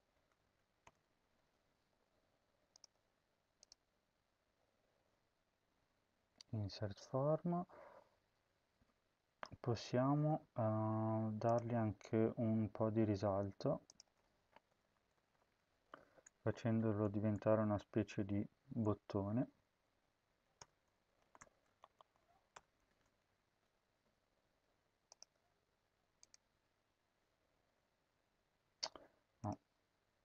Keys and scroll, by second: 0.1 Up, 0.3 End, 0.7 BackSpace, 1.3 ctrl+s, 14.3-17.8 typing, 19.1 @, 19.7 Left, 20.1 Right, 20.3 BackSpace, 20.9 Left, 21.3 @, 21.5 Left, 21.7 Left, 22.5 BackSpace, 22.7 @, 23.3 ctrl+s.